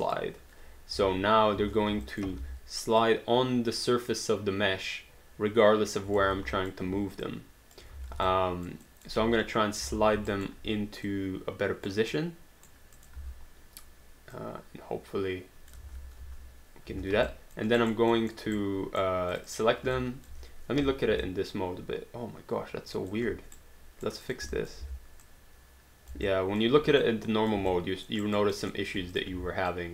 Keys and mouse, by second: 0.0 click, 1.0 space, 2.1 alt+click, 2.4 w, 3.0 click, 6.2 ctrl+click, 6.2 ctrl+z, 6.6 alt+click, 7.3 click, 7.9 ctrl+z, 8.3 alt+click, 9.2 space, 10.3 alt+right click, 11.1 click, 12.1 right click, 13.0 click, 13.2 w, 14.4 click, 15.8 ctrl+z, 16.2 space, 17.3 alt+click, 17.8 alt+right click, 18.2 alt+middle click, 18.6 right click, 19.3 click, 20.3 alt+click, 21.2 alt+click, 23.6 right click, 24.3 click, 24.6 alt+click, 24.8 w, 25.2 click, 26.2 alt+click, 27.0 click, 27.8 alt+click, 28.2 alt+right click, 28.6 alt+middle click, 29.1 click, 29.3 w, 29.7 click.